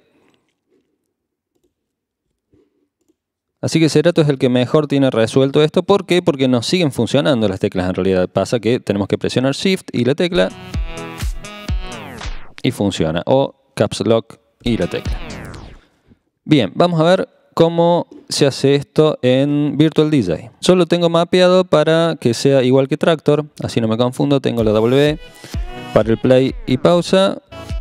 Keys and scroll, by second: 0.3-1.0 typing, 2.3 ⟲, 10.3 shift+w, 11.9 shift+w, 14.6 shift+w, 24.5 w.